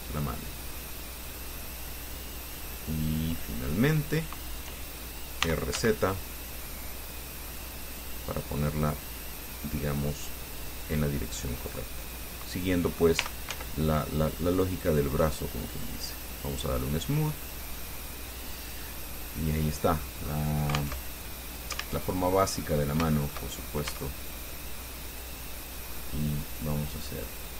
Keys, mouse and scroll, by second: 0.8 click, 1.8-4.6 middle drag, 5.6 r, 6.0 z, 8.1 click, 9.0-12.5 drag, 13.4 r, 13.7 z, 15.1 click, 16.0 click, 16.5 scroll down 2, 16.9-18.4 drag, 18.8 scroll down 2, 19.0-20.4 drag, 20.8 scroll up 2, 21.2 alt+Tab, 22.2 alt+Tab, 22.4 alt+click, 23.3 shift+click, 24.1 shift+Tab, 24.4 shift+click, 25.3 right click, 25.7-27.5 drag.